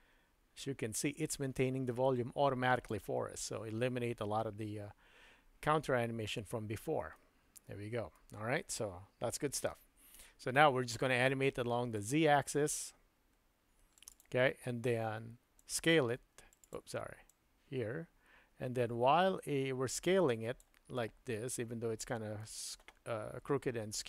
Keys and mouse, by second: 7.1-8.3 middle drag, 9.6 super+z, 11.9-14.2 drag, 15.6-16.8 drag, 17.3-20.7 drag, 21.0-22.4 middle drag.